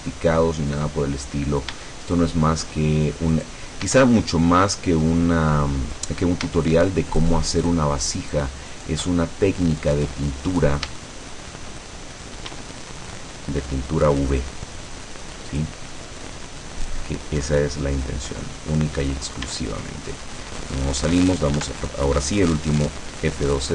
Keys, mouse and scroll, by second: 0.8 click, 1.2-1.8 scroll up 2, 2.0 shift+middle click, 3.4 right click, 5.2 click, 6.0 right click, 6.6 shift+right click, 7.2 shift+right click, 7.7 shift+right click, 8.3 shift+right click, 8.8 shift+right click, 9.3-10.2 shift+scroll down 4, 10.2 middle click, 11.1 shift+click, 12.6 e, 15.6 click, 17.0-17.4 scroll down 1, 17.5 middle click, 18.5-18.9 scroll up 1, 19.5 Tab, 20.1-20.8 scroll down 4, 21.6 F12.